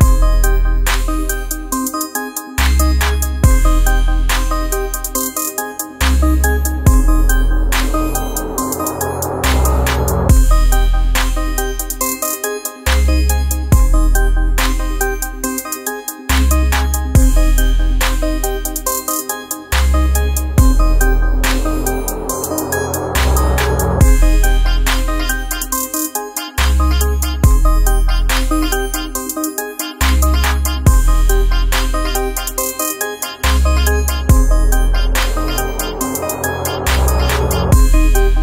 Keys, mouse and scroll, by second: 0.4-4.4 drag, 11.1 F7, 12.2 scroll down 1, 15.0-20.8 drag, 23.2-30.5 drag, 30.5-32.6 scroll up 1, 34.9-38.4 drag.